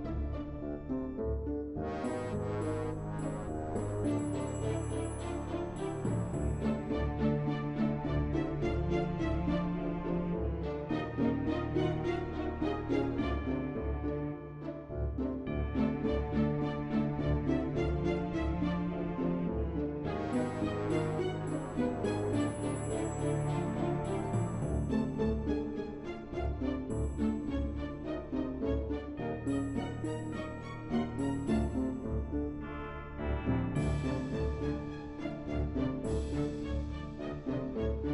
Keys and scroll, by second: 19.2 ctrl+w.